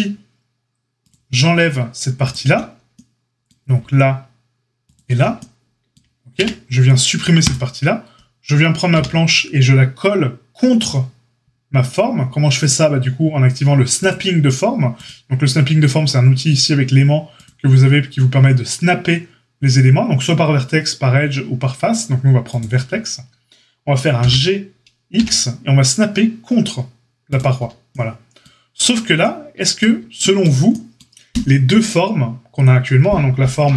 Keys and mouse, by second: 1.0-2.2 drag, 2.2-4.8 alt+shift+middle drag, 4.8 alt+shift+click, 4.9-13.9 alt+shift+middle drag, 6.3 x, 8.9 l, 13.9 click, 14.0-15.1 middle drag, 15.1-27.3 drag, 24.1 g, 27.3-33.7 middle drag, 28.8 Tab, 33.6 Tab.